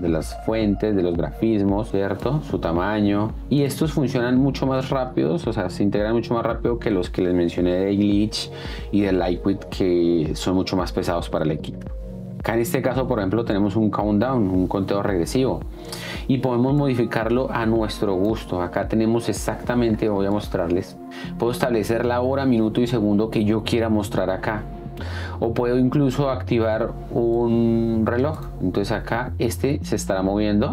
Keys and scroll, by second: 4.7 space, 12.0 Down, 12.0 space, 16.1 space, 29.8 space.